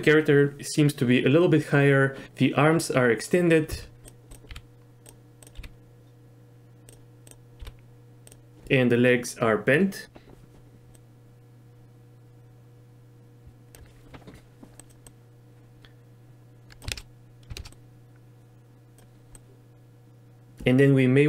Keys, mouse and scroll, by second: 3.8 z, 4.3 drag, 4.5 r, 5.4 click, 5.6 r, 7.6 r, 11.0-13.8 drag, 14.8 click, 15.1-16.8 drag, 16.9 shift+space, 17.6 shift+space, 17.7-19.0 drag, 19.4-20.5 drag.